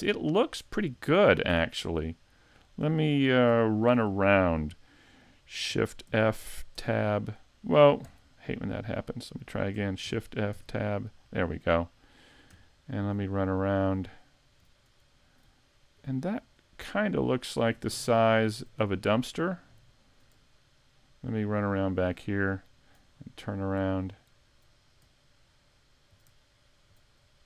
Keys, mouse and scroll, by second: 0.6-1.0 scroll down 4, 1.7 a, 1.8 middle click, 3.7 shift+middle click, 6.1 shift+f, 8.8 middle click, 10.0 shift+f.